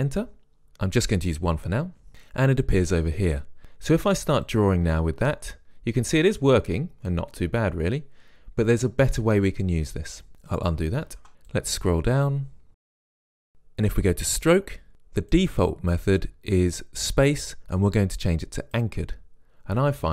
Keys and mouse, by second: 0.0 Return, 4.7-6.6 drag, 11.3 ctrl+z, 11.6-12.7 drag, 13.8-14.9 drag, 15.4-17.4 drag.